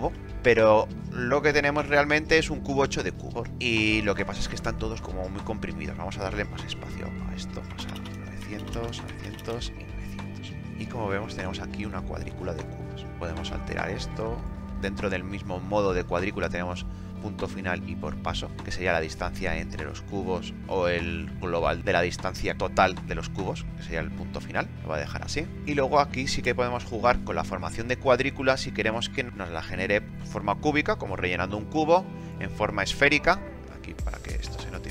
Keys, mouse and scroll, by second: 7.6-8.5 typing.